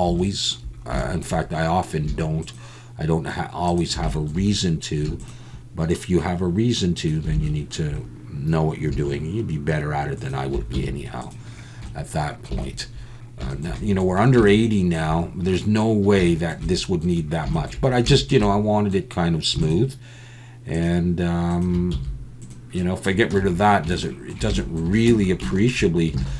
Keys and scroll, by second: 10.7 x, 21.9 x, 23.3 Tab, 25.1 Tab, 26.2 alt+a.